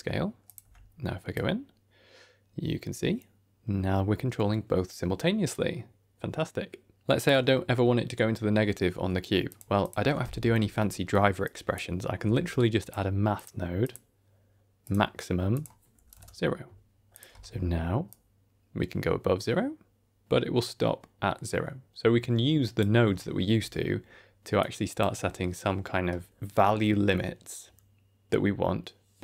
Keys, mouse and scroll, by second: 0.3 click, 0.5 Tab, 1.2-7.2 shift+drag, 9.4 click, 9.7 click, 9.9 Tab, 10.7 middle click, 11.0 scroll down 1, 11.3 click, 12.1 q, 13.7 click, 15.4 click, 17.0 click, 17.2 Tab, 18.0-22.7 drag, 23.5 Tab, 24.5 click.